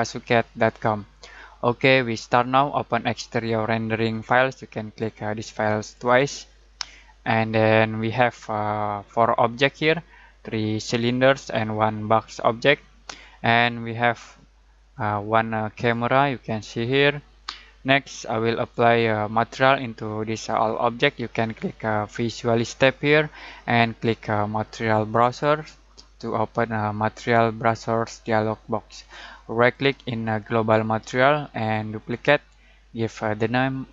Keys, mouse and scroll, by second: 5.8 click, 14.8 click, 18.0 click, 22.6 click, 24.9 click, 29.7 right click.